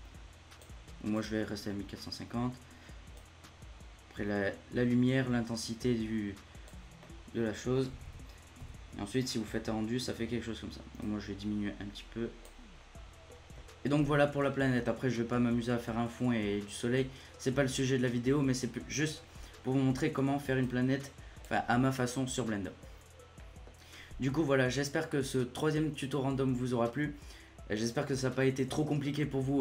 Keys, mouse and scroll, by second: 2.0-2.9 scroll down 1, 3.1-6.1 drag, 7.0-7.9 middle drag, 7.9 a, 8.0 a, 8.5 z, 9.2-11.0 middle drag, 11.0-12.7 drag, 12.7 scroll up 1, 12.9-20.2 middle drag, 20.6-22.8 drag, 22.8-23.3 scroll down 2, 23.3-29.6 middle drag.